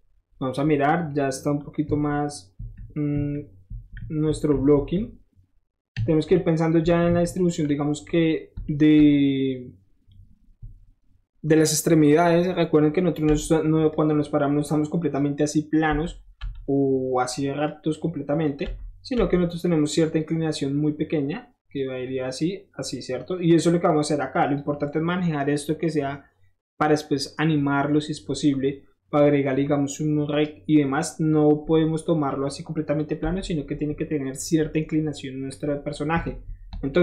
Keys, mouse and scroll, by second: 0.7-1.1 middle drag, 2.0-4.7 typing, 5.9 KP_3, 6.8 KP_1, 7.1 KP_3, 8.4 shift+middle drag, 8.7 shift+middle drag, 13.4 7, 13.9-15.1 drag, 16.0 7, 17.7-18.5 drag, 17.7 7, 19.6-21.8 drag, 22.0-24.6 drag, 32.3-33.0 drag, 33.3 7, 33.6 scroll up 1, 35.2 scroll up 1, 35.5 click, 36.2 click, 36.6-37.0 middle drag, 36.7 shift+Tab.